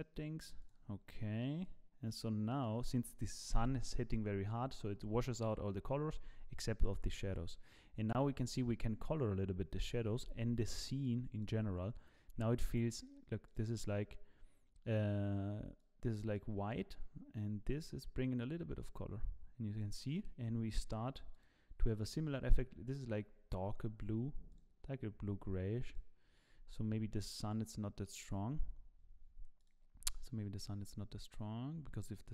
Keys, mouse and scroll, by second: 0.6 click, 8.9-9.9 scroll down 5, 10.2 ctrl+b, 13.5 click, 25.8 click, 27.4 click.